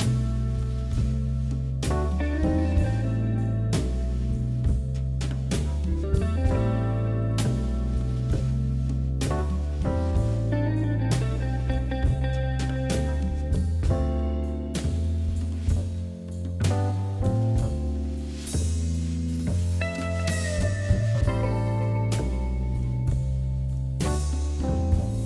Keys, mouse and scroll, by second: 0.1-1.1 shift+middle drag, 1.1 3, 1.5 click, 1.9 KP_1, 2.3 scroll up 3, 2.6 shift+middle click, 2.9-3.6 scroll down 2, 3.6-4.3 scroll up 1, 4.3 shift+z, 5.0 e, 5.6 scroll up 1, 5.9 shift+middle click, 6.7 g, 7.7 ctrl+z, 8.0 ctrl+z, 8.8 shift+z, 9.0 middle click, 9.4 scroll down 2, 9.5 middle click, 10.0 2, 10.4 click, 10.9 alt+shift+click, 11.5 g, 13.3 KP_3, 15.4 g, 17.4 middle click, 18.1 click, 18.5 b, 18.5 click, 18.9 KP_1, 19.9 e, 20.7 shift+z, 21.6 g, 23.1 s, 23.7 scroll up 3, 23.9 shift+middle click, 24.5 e.